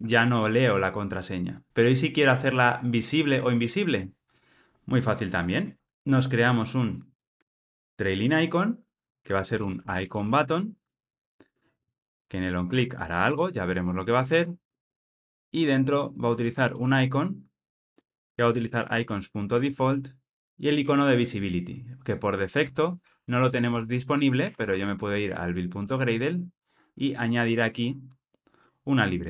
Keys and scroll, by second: 8.2 Return, 17.4 Return, 18.7 Return.